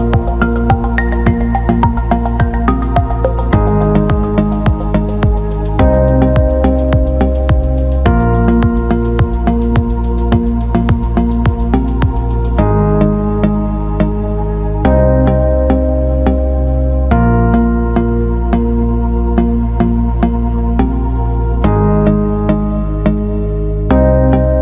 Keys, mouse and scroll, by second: 0.5 alt+shift+middle click, 0.8 alt+middle click, 2.9 click, 3.9-8.1 drag, 8.4 alt+middle click, 9.1 alt+middle click, 15.0 alt+middle click, 15.8 alt+middle click, 17.0 click, 18.5-19.1 alt+middle drag, 19.5-20.1 alt+middle drag, 20.4 alt+middle click, 21.0 Tab, 21.8 alt+middle click, 22.8-24.6 drag.